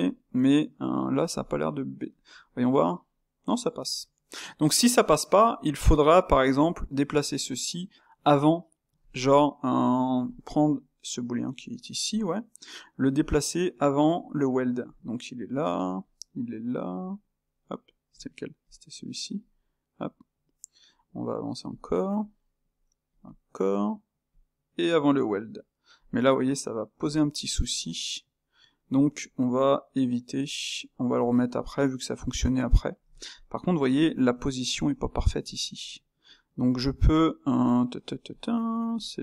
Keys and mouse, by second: 0.0-2.0 ctrl+middle drag, 2.0 click, 2.8-4.9 middle drag, 4.9 click, 9.2 click, 11.6 click, 12.2 click, 13.3-18.2 drag, 18.7 click, 19.5-27.1 drag, 27.7 click, 31.3-33.3 drag, 33.3-36.2 middle drag, 36.2 click, 36.7 click, 37.0 click, 38.3-38.9 ctrl+middle drag.